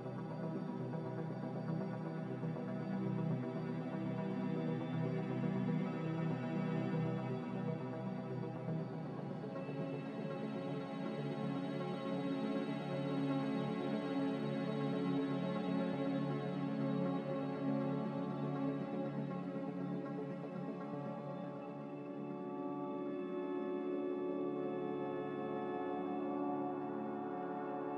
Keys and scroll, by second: 0.8 ctrl+b, 3.9 typing, 5.0 f, 6.6-7.0 typing, 8.5 ctrl+b, 11.0 m, 11.5 a, 21.5 z.